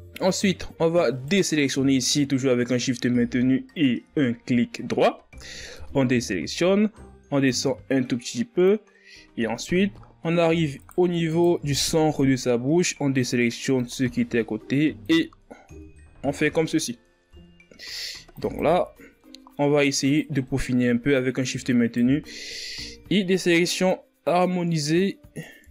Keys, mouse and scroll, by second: 0.2-1.8 middle drag, 1.8 shift+right click, 2.6 shift+right click, 6.4 KP_1, 8.1-9.6 drag, 9.6-11.5 middle drag, 11.5 right click, 12.0 shift+right click, 12.8 KP_1, 14.4-15.9 drag, 15.9-16.4 scroll down 1, 16.4 Tab, 16.8-17.4 scroll down 4, 17.4-18.0 scroll up 8, 18.0 Tab, 19.0 click, 19.8 scroll down 1, 19.9 middle click, 20.7 right click, 21.2-22.5 middle drag, 22.5 shift+right click, 23.3 KP_1, 25.0-25.7 drag.